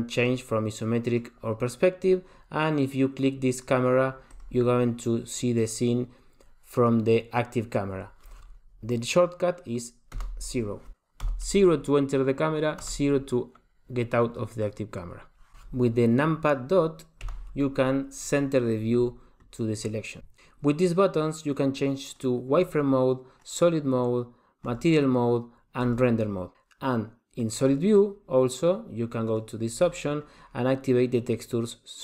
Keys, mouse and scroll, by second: 0.2 click, 1.1 click, 4.3 click, 10.2 KP_0, 11.3 KP_0, 12.8 KP_0, 15.5-16.1 scroll down 10, 15.5 KP_Decimal, 17.2 KP_Decimal, 22.3 click, 23.6 click, 25.0 click, 26.0 click, 27.9 click, 29.5 click.